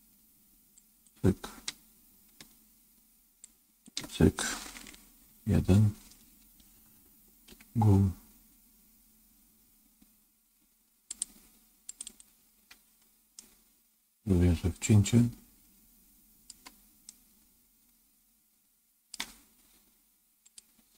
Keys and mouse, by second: 0.7 shift+click, 3.4 shift+click, 5.2 KP_1, 7.4 g, 11.8 click, 12.0 click, 13.3-16.4 middle drag, 17.0-19.0 middle drag.